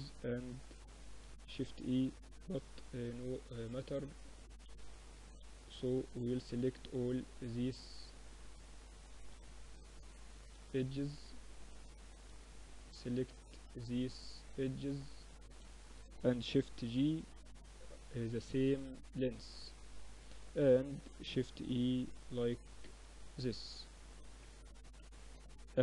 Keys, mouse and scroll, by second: 0.5 Tab, 2.0 Tab, 3.6 a, 3.9-8.3 drag, 7.3-10.9 typing, 14.3 ctrl+z, 15.7 shift+g, 18.9-20.4 middle drag, 20.4 shift+e, 22.5 Tab, 24.1 Tab, 24.5 Tab, 25.4 t.